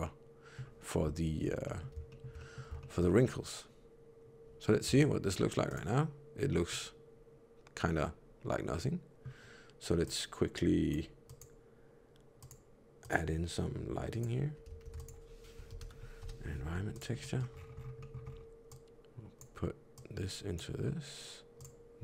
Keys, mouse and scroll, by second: 1.6 middle click, 2.0 shift+middle click, 2.1 shift+middle click, 2.3 middle click, 2.7 shift+middle click, 4.8 z, 6.6 middle click, 9.9 click, 11.2 click, 14.7 shift+a, 17.1 middle click, 17.4-18.3 scroll up 11, 17.9 middle click, 18.6 click, 19.9 click.